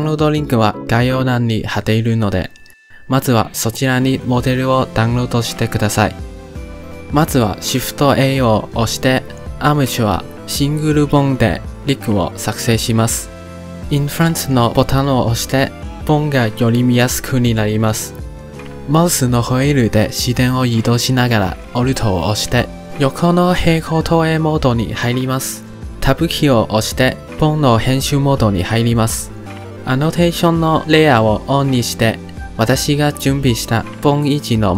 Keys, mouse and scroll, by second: 6.8 middle click, 7.6 shift+a, 13.0 shift+middle click, 14.1 click, 15.2 click, 17.9-25.5 middle drag, 25.5 click, 27.4 click, 28.0 Tab, 30.6-33.2 drag, 33.8-34.7 scroll up 1.